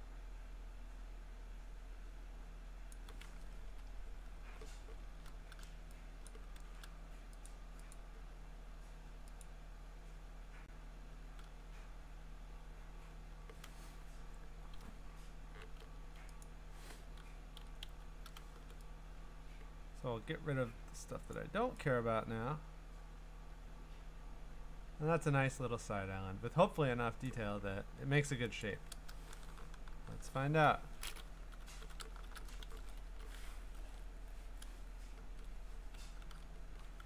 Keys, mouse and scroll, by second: 2.9 click, 3.8 Return, 4.4 b, 5.0 scroll, 6.3 click, 6.6 ctrl+z, 7.5 click, 7.9 click, 9.4 click, 14.8-15.6 ], 15.8 ], 16.4-19.5 drag, 17.3-18.5 typing, 21.3 click, 27.2 click, 28.6 ctrl+click, 30.0 F4, 31.2-33.2 typing, 33.8 ctrl+Tab, 35.2 ctrl+Tab, 35.4 typing, 36.2 ctrl+Tab.